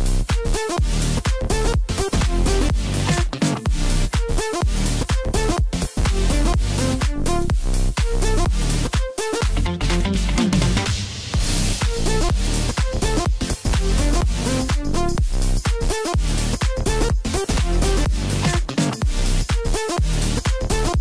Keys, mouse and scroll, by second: 2.3 g, 4.5 s, 5.6 g, 8.3-8.7 scroll down 4, 8.7-11.3 middle drag, 11.3 scroll up 2, 11.5 scroll down 3, 11.8 middle click, 12.7 scroll up 1, 12.9-13.3 scroll down 1, 13.3-14.4 middle drag, 14.4 KP_1, 15.8-18.8 drag, 18.9-21.0 drag.